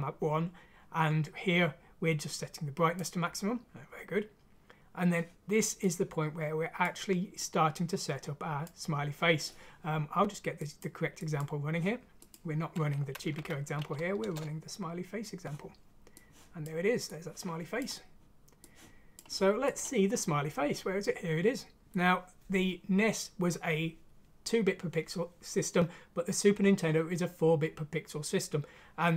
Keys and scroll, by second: 13.3 F6, 14.2 Return.